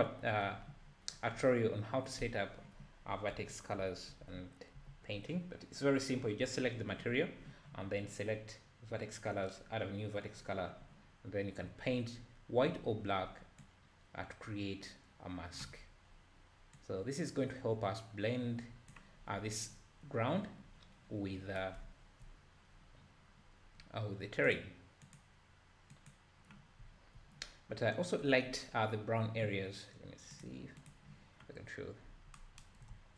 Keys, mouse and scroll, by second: 0.0 ctrl+z, 13.7-21.8 drag, 21.8-22.5 scroll down 2, 22.5-24.6 scroll up 1, 24.6-26.8 drag, 27.5-28.7 scroll up 4, 30.3 click, 30.8 click.